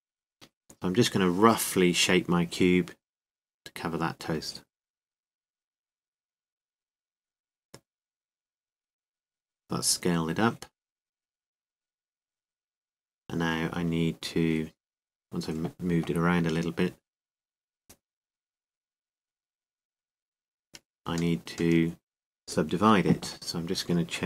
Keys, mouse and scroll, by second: 0.0 click, 0.3-1.7 drag, 4.1 g, 6.0-7.8 drag, 6.8 z, 8.5 s, 13.8-16.4 drag, 16.4 Tab, 17.5 w, 19.9 ctrl+z, 20.8 w, 22.5 t.